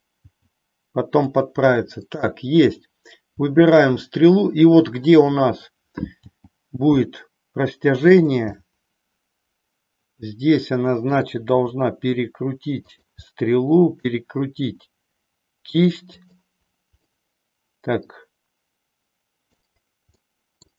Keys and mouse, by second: 0.2 g, 1.3 click, 6.2 g, 8.2 click, 8.7-11.2 middle drag, 11.4 r, 13.3 middle click, 14.5 r, 17.1-19.7 middle drag, 20.2 middle click.